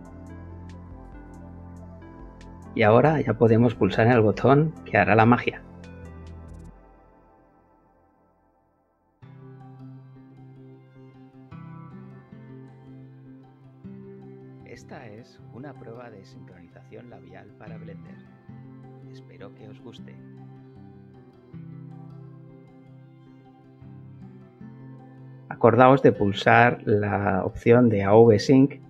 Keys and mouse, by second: 6.4 click, 14.0 space, 20.7 Escape, 25.9 click, 28.2 click.